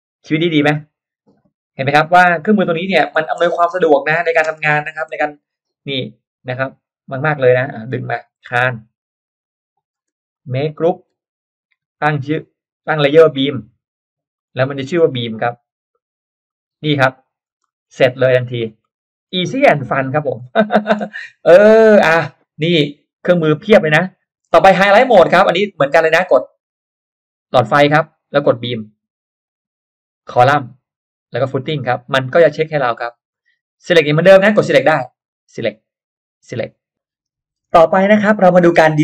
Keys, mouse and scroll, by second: 0.3-0.6 scroll up 1, 1.1 scroll up 1, 1.4 space, 1.5 click, 1.9-3.4 scroll down 3, 2.2 middle click, 2.6 m, 2.8 click, 4.1 click, 4.5 space, 4.6-5.0 scroll up 1, 4.7 middle click, 5.3 middle click, 5.8 r, 6.4 click, 7.2 click, 7.5 middle click, 7.9 p, 8.2 click, 8.4 middle click, 9.7 click, 9.9 space, 10.1 click, 10.6 click, 11.1 g, 13.0 click, 14.3 click, 15.3 click, 16.4 click, 17.6 space, 17.6 middle click, 18.4-19.3 scroll down 2, 18.8 middle click, 19.3-20.0 scroll up 2, 20.4-21.2 scroll down 2, 20.6 middle click, 21.2-21.6 scroll up 1, 21.4 middle click, 22.4 scroll down 1, 24.1-24.4 scroll down 1, 26.6 click, 28.7 click, 30.2 click, 31.4 click, 32.1 middle drag, 32.4 middle click, 33.6 click, 35.2 click, 36.3 click, 38.2 click.